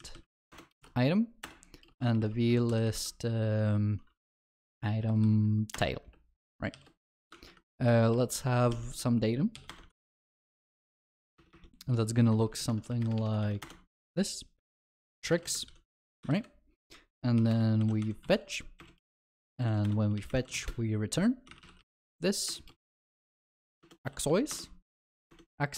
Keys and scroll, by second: 0.5 Return, 7.0 ctrl+alt+shift+l, 25.2 ctrl+BackSpace.